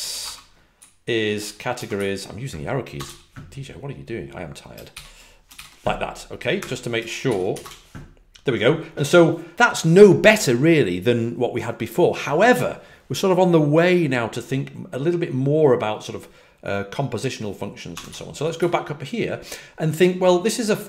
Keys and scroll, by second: 0.0-0.1 typing, 1.6-2.9 typing, 7.5 Return, 17.9 Escape, 18.0 typing.